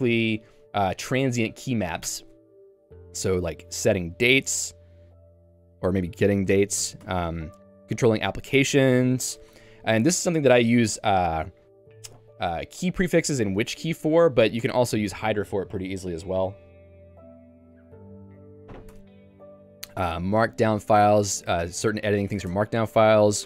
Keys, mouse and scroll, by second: 2.1 Tab, 6.6 Tab, 6.8 k, 7.1 Tab, 7.6 j, 8.0 k, 9.5 Tab, 14.7 Tab, 19.5 j, 20.4 Tab.